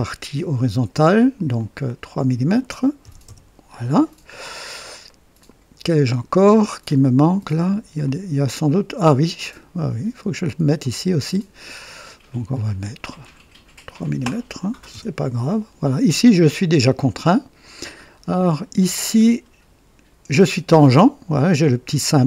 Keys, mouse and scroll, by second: 1.5 click, 2.9-3.9 typing, 5.0-6.5 right drag, 7.9-9.6 drag, 10.7 click, 13.7 click, 14.7 KP_3, 14.9 KP_Enter, 16.9-17.6 right drag, 17.7 scroll down 1, 18.3-19.0 right drag, 19.1-19.5 scroll up 1.